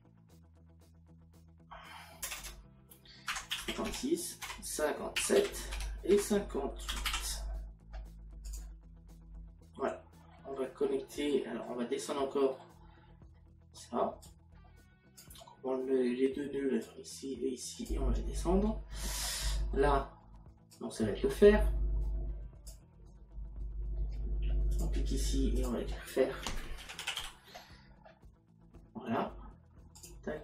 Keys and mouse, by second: 0.4 KP_6, 2.3 BackSpace, 3.8 KP_6, 4.5 KP_Decimal, 5.8 Tab, 6.2 KP_Decimal, 11.0 middle click, 12.6 middle click, 14.3 click, 16.8 click, 19.3 middle click, 20.8 click, 24.7 click, 26.9 f, 30.0 click.